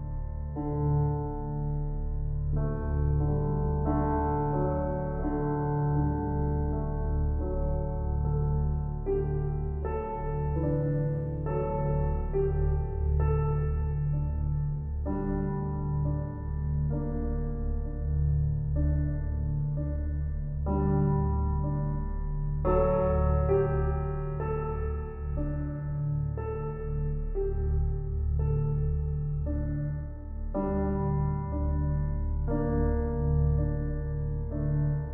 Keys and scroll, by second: 30.5 ctrl+e.